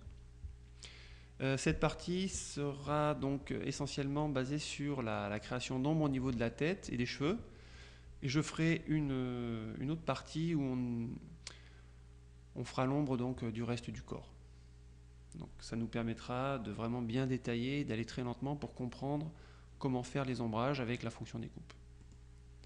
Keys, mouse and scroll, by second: 4.3-5.8 drag, 7.9 click, 22.1 click.